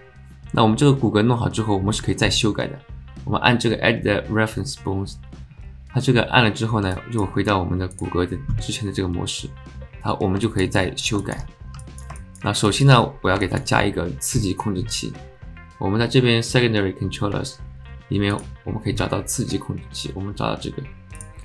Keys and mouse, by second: 6.9 click, 7.9 click, 10.4 alt+shift+click, 10.8 alt+click, 11.2 alt+shift+click, 11.8 alt+middle click, 12.2 alt+shift+middle click, 12.7 alt+shift+middle click, 13.4 shift+middle click, 18.4-21.2 drag.